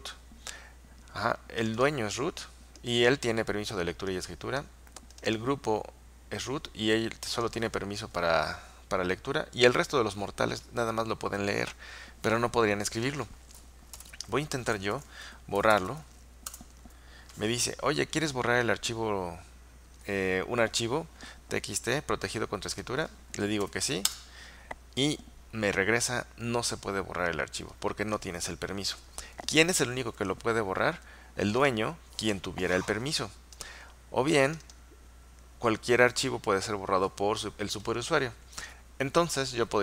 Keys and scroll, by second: 14.1-16.3 typing, 16.6 Return, 23.7 typing, 24.2 Return.